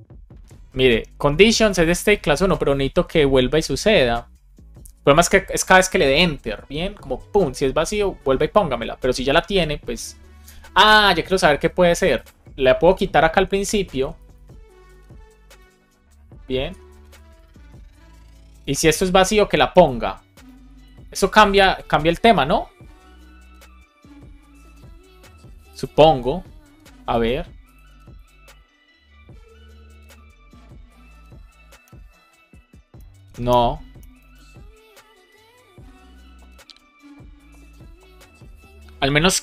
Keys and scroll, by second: 13.3 alt+Up, 15.5 Right, 16.5 Up, 17.0 super+Right, 17.2 Return, 20.7 shift+super+Left, 21.0 BackSpace, 21.2 super+s, 30.0 Return, 31.8 Return, 33.0 Return.